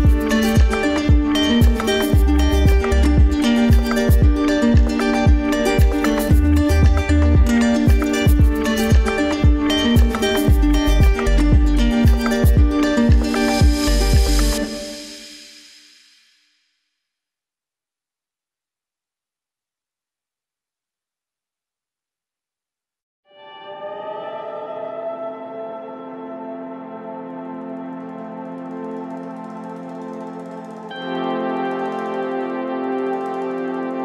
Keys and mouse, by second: 0.2-1.1 middle drag, 4.1-4.5 shift+middle drag, 5.1 g, 11.3 click, 15.4 drag, 17.8 alt+z, 18.5 click, 19.0 g, 28.9 g.